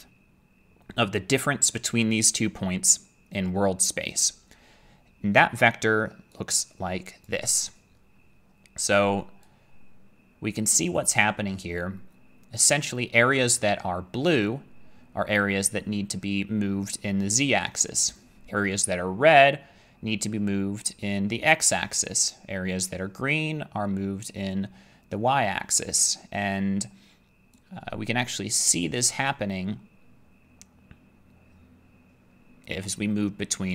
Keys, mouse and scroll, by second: 7.3-13.2 drag, 13.2-15.8 middle drag.